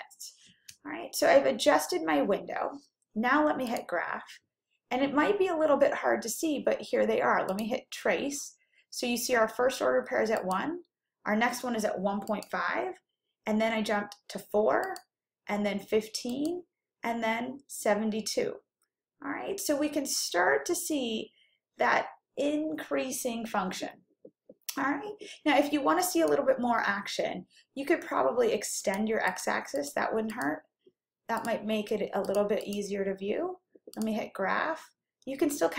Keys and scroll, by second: 3.7 F5, 10.5 Right, 12.4 Right, 15.2 Right, 16.4 Right, 28.9 Down, 29.4 Down, 30.4 Down, 31.5 Down, 32.4 1, 33.1 0.